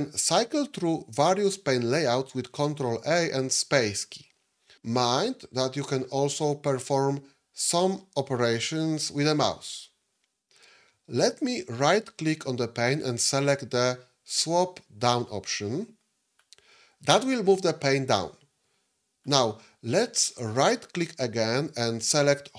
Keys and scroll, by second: 2.9 ctrl+a, 4.9 space.